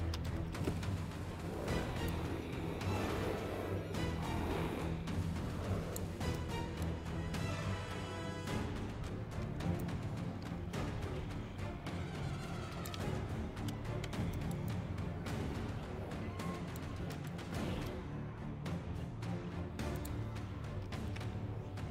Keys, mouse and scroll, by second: 2.1-5.9 alt+drag, 6.3 alt+middle click, 8.1 z, 9.8-12.8 alt+drag, 12.9 z, 14.3 alt+middle click, 14.7-16.7 alt+drag, 17.1 alt+middle click, 19.9 click.